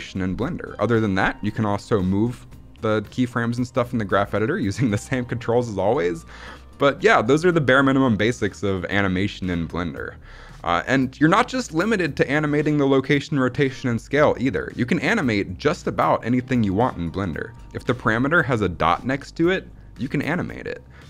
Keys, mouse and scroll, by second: 1.3 click, 1.7 g, 3.6 right click.